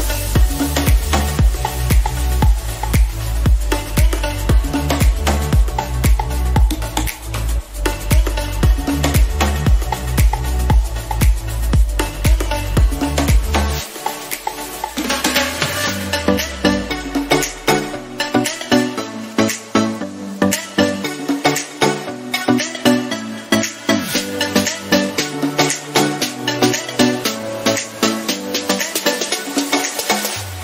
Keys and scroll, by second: 9.9 ctrl+d, 11.8 ctrl+j.